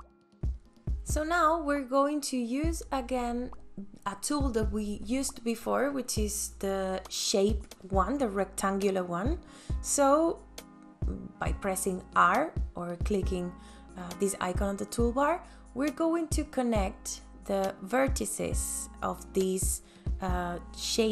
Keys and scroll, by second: 13.4 r.